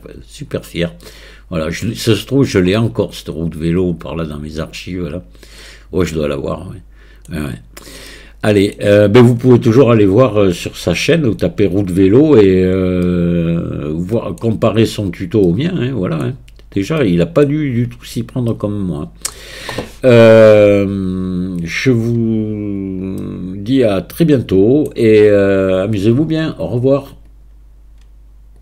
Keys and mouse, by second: 2.8-7.3 middle drag, 8.1-8.7 middle drag, 13.1-14.4 middle drag, 15.5-16.2 drag, 17.1 middle click, 18.5-19.4 middle drag, 23.2-24.1 middle drag, 24.1-24.9 drag.